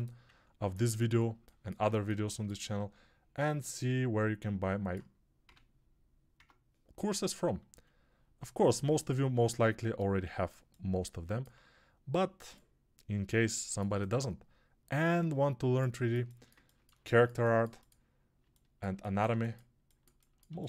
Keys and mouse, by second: 0.5 ctrl+r, 5.3 Tab, 5.3-10.4 right drag, 6.2 Tab, 7.5 a, 10.4-18.2 alt+drag, 18.2-20.6 alt+middle drag.